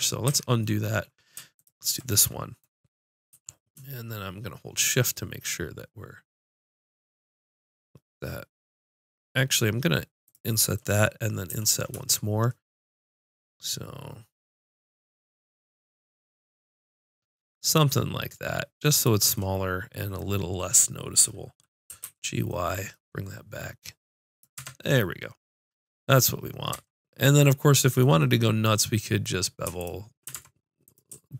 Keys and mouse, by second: 0.2 ctrl+z, 1.5-3.4 drag, 3.3 i, 10.3-11.4 drag, 11.4 i, 19.0-21.2 drag, 21.8 g, 24.3-25.3 drag, 24.5 Tab, 26.7 Tab, 29.7 click, 30.3 ctrl+Tab.